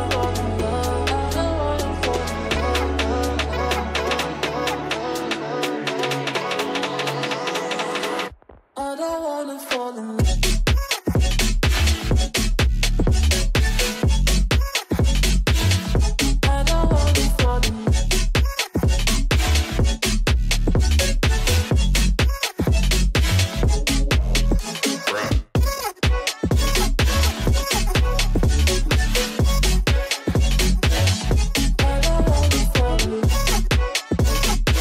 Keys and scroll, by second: 1.3 F3, 8.0 Delete, 10.8 shift+F2, 11.1 shift+Page_Down, 11.9 F3, 12.1 Escape, 27.3 space, 32.7 shift+F2, 33.7 F9.